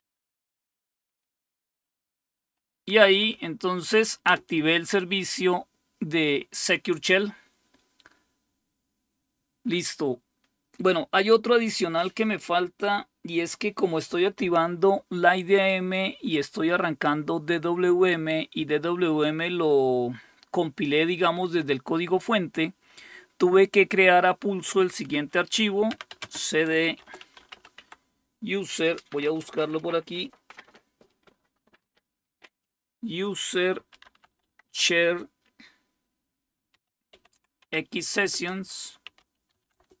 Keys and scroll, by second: 3.1 Up, 3.4 Up, 4.3 Return, 25.7-28.0 typing, 33.6-34.7 typing, 36.5-40.0 typing, 38.3 Return.